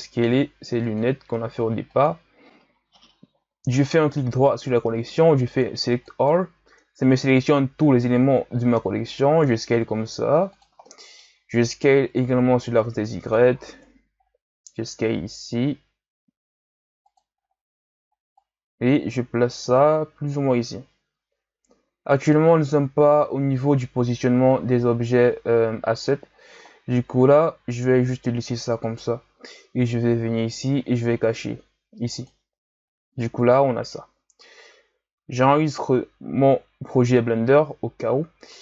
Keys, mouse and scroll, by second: 0.8 click, 1.9 click, 3.9-6.9 right drag, 6.9-9.2 scroll down 4, 9.2 s, 10.9-11.3 middle drag, 11.3-12.2 scroll up 4, 12.2-13.7 drag, 13.7 KP_1, 14.1-14.8 scroll up 5, 14.8 s, 17.4-18.4 scroll up 4, 18.4-20.5 drag, 20.5 s, 26.7-27.5 scroll down 2, 27.5 s, 30.4 click, 32.1 click, 35.5 ctrl+s.